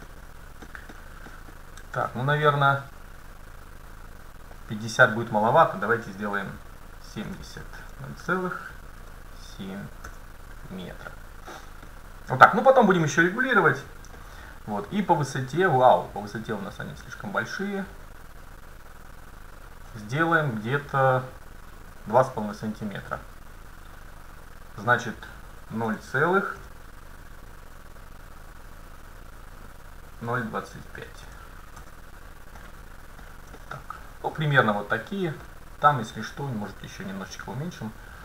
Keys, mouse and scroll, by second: 1.4-2.9 scroll down 1, 2.9-3.9 scroll down 1, 3.9 middle click, 4.6-6.4 drag, 11.6 middle click, 12.0-13.4 scroll down 1, 13.4 scroll up 1, 13.4-13.9 scroll down 1, 14.2-17.2 middle drag, 17.2-19.1 drag, 20.0-22.1 middle drag, 24.0-26.4 drag, 32.7-33.3 scroll up 1, 33.3-33.6 scroll down 1, 33.6-35.5 middle drag, 37.4-38.2 drag.